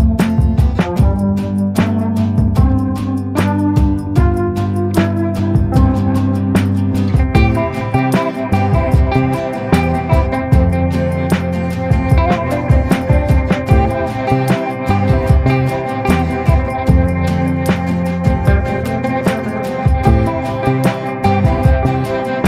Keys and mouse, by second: 0.3 middle click, 1.5-3.0 shift+middle drag, 4.5 click, 4.9 ctrl+z, 5.3 click, 6.0 click, 6.7 click, 8.1 ctrl+z, 8.7 click, 9.4 ctrl+z, 9.6-11.0 drag, 11.2 click, 11.8 ctrl+z, 12.1 click, 12.9 ctrl+z, 13.1 click, 13.8-15.8 drag, 14.6 ctrl+z, 15.8-17.6 middle drag, 18.4 middle click, 20.4 middle click, 21.3 click, 22.0 ctrl+z.